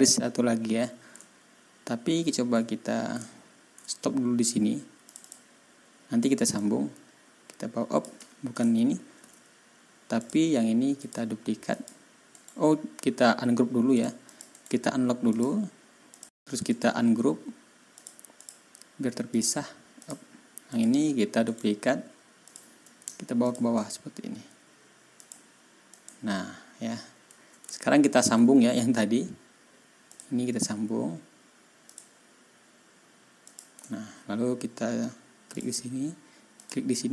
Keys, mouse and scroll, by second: 1.9 ctrl+scroll up 2, 3.2 ctrl+scroll down 2, 5.0 click, 6.5-8.1 drag, 9.1 ctrl+y, 10.1 click, 10.9 click, 11.6 click, 12.3 middle click, 13.9 click, 14.2 click, 14.5 right click, 15.2 click, 16.0 click, 16.6 right click, 17.9 click, 18.3 click, 19.3 click, 19.9 click, 20.6 click, 21.4 right click, 22.4 click, 23.4 shift+click, 25.1 click, 25.9 click, 27.6-28.1 ctrl+scroll up 2, 30.0 click, 31.8 click, 33.4 click, 33.8-34.2 ctrl+scroll down 1, 35.5 ctrl+click, 36.5 ctrl+click.